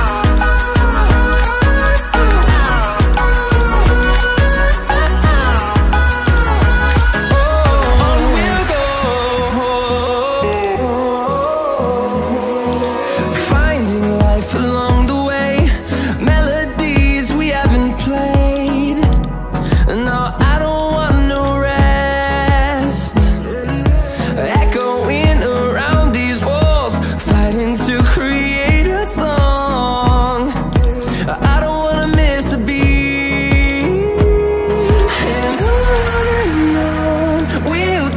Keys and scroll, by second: 5.5 ctrl+z, 13.2 Return, 13.5 Delete, 14.7 ctrl+d, 31.7 ctrl+z, 32.9 ctrl+z, 34.3 ctrl+z.